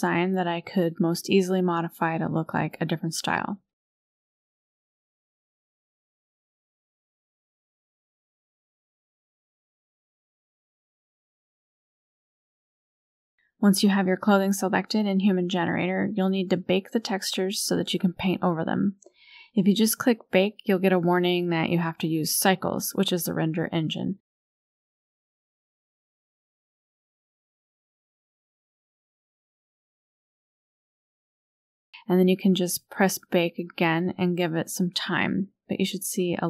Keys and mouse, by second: 6.3 middle click, 7.1-8.9 middle drag, 10.3 click, 13.0 click, 15.2 click, 19.0-22.0 drag, 22.6 click, 23.9-24.8 drag, 34.1 click.